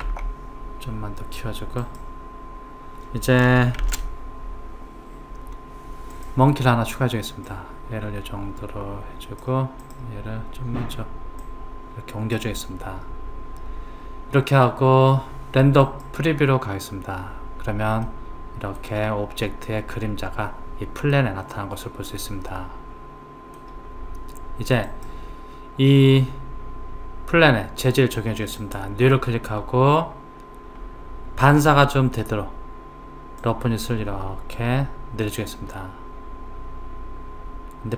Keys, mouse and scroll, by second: 3.9 shift+a, 7.5 click, 9.8 click, 11.4 click, 12.9-15.9 scroll up 2, 15.9 click, 18.1-21.1 middle drag, 24.9 click, 28.6 click, 33.4 click.